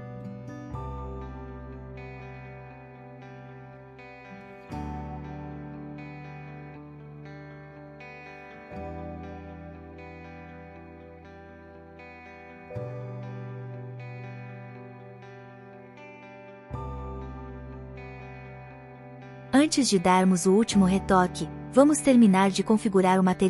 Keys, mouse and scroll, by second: 0.9 click, 1.3 click, 1.7 click, 3.0 space, 4.2 click, 5.9 space, 8.0 shift+Left, 9.7 click, 11.6 space, 15.6 space, 16.8 shift+Left, 17.6 shift+Right.